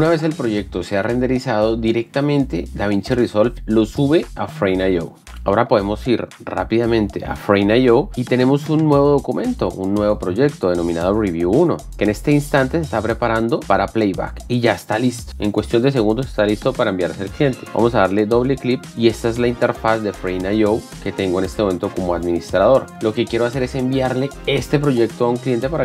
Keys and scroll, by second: 5.2 alt+Tab.